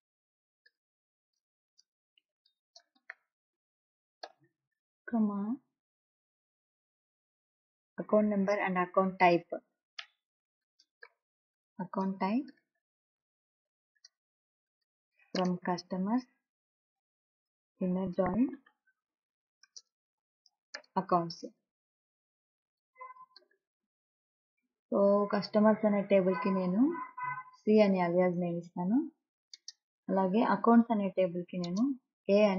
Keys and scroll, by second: 0.0-4.5 typing, 9.8-21.9 typing, 23.0-24.5 typing, 28.9 c, 29.9 space, 32.0 space.